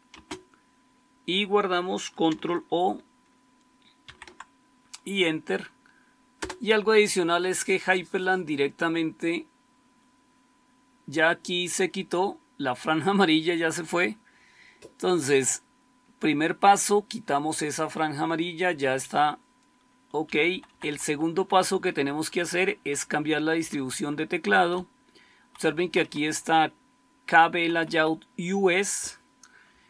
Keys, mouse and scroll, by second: 0.0 space, 4.0 ctrl+o, 4.3 typing, 6.1-6.8 typing, 20.1 Down, 20.4 Down, 20.6 Down, 20.8 Down, 21.0 Down, 21.2 Down, 21.5 Down, 21.7 Down, 21.8 Down, 22.0 Down, 22.2 Down, 22.4 Down, 22.6 Down, 22.9 Down, 23.1 Down, 23.5 Down, 23.7 Down, 23.9 Down, 24.6-25.3 Right, 25.6 Right, 25.8 Right, 25.9 Right, 26.1 Right, 26.3 Right, 27.5 Right, 27.7 Right, 27.8 Right, 29.6 Delete.